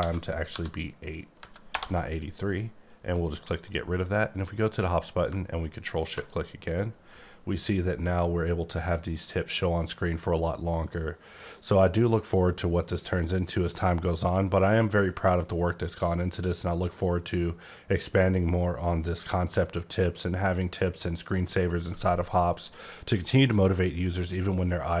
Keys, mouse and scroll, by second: 0.0 Home, 0.5 8, 1.7 Return, 3.6 click, 4.6 click.